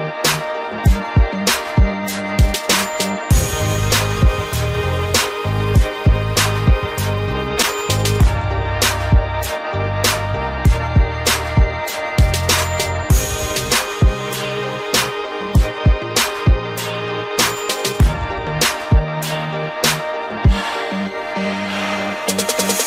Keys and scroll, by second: 4.7 ctrl+z.